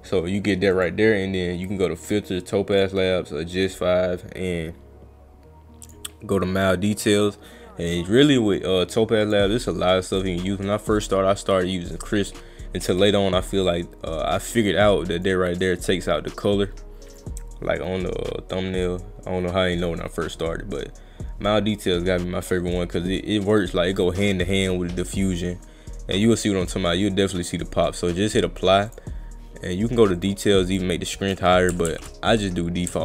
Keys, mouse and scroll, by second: 0.7 click, 2.8 click, 3.7 click, 5.9 click, 9.2 click, 10.1 click, 12.9 click, 14.3 click, 15.2 click, 16.0 click, 17.1 click, 28.9 click, 30.2 click, 30.7 click, 31.9 ctrl+z.